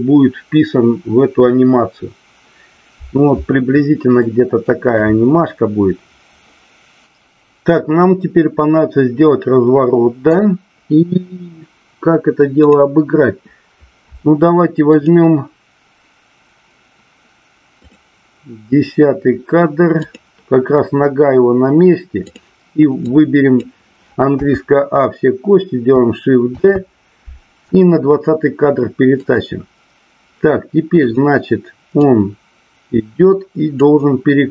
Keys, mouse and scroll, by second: 4.1-4.6 shift+middle drag, 12.7 click, 15.0 click, 17.8 click, 20.0 click, 22.3 click, 23.1-23.7 drag, 26.6 shift+d, 29.2 click, 31.0 click, 32.0-33.8 drag.